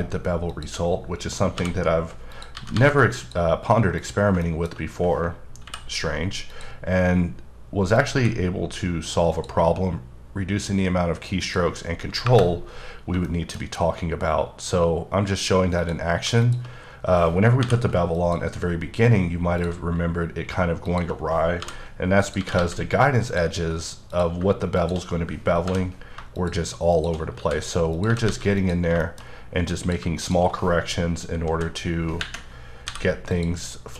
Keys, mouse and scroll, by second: 1.5 j, 2.3 click, 2.5 g, 2.7 g, 3.1 click, 3.9 click, 4.4 shift+middle click, 5.6 k, 6.5 click, 7.9 click, 8.1 e, 9.3 click, 11.4 click, 12.2 KP_Enter, 12.9 scroll down 3, 13.1-14.5 shift+scroll up 4, 13.2 shift+middle click, 14.5-15.8 scroll down 1, 15.8 click, 17.6 m, 18.1 click, 19.6 click, 20.8 shift+click, 21.6 j, 22.2 click, 22.3 g, 22.5 g, 23.2 click, 24.1 click, 24.8 shift+click, 25.7 j, 26.3 click, 26.9 shift+click, 27.3 f, 27.9 click, 28.0 g, 28.2 g, 28.5 click, 29.0 shift+middle click, 29.8 click, 31.5 ,, 32.8 m, 33.3 click.